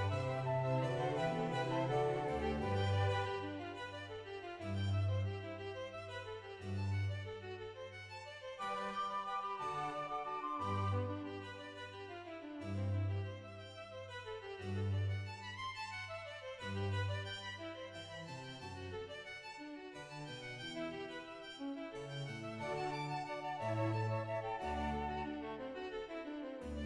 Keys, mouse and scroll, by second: 1.1 scroll up 6, 1.4 g, 1.8 right click, 2.8 click, 2.8 o, 3.9 shift+middle click, 3.9-4.3 scroll down 2, 3.9 g, 4.3 click, 4.5 shift+middle click, 5.5 click, 5.5 right click, 5.5 g, 5.8 g, 6.1 click, 6.1 right click, 6.4 right click, 6.4 g, 6.7 click, 8.8 click, 8.9 right click, 9.4 shift+click, 9.4-10.1 scroll down 2, 9.8 shift+middle click, 9.8 right click, 9.8-10.1 scroll up 2, 10.1 ctrl+r, 10.4 right click, 10.4 click, 10.4 g, 12.1 click, 12.3 click, 12.3 right click, 12.3 g, 13.1 right click, 13.1 right click, 14.3 right click, 14.3 1, 14.5 g, 15.9 click, 15.9-18.3 typing, 16.1 ctrl+right click, 16.6 middle click, 16.9 click, 17.6 right click, 18.1 click, 18.3 right click, 18.9 click, 19.7 scroll down 1, 19.8 shift+middle click, 20.8-21.5 scroll up 3, 21.5 scroll down 1, 22.6 click, 22.6 right click, 22.6-22.9 scroll down 2, 23.5 ctrl+z, 23.5 middle click, 23.9 ctrl+right click, 24.3 click, 24.5 s, 24.8 right click, 25.1 g, 25.5 right click.